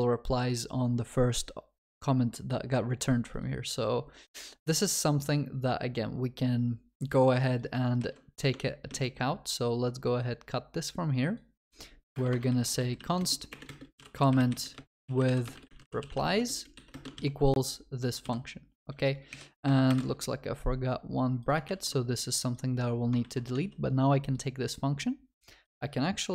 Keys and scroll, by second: 8.1 ctrl+c, 8.9 ctrl+c, 17.3 ctrl+v, 21.8 ctrl+s, 23.2 ctrl+c, 23.6 ctrl+s.